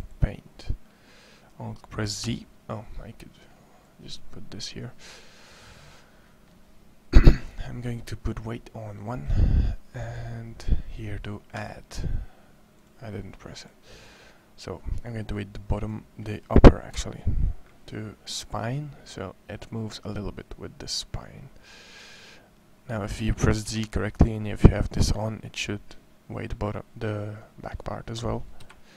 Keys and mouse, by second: 2.0 z, 3.7 click, 15.5 right click, 16.7 KP_1, 23.4 Escape, 28.4 KP_1.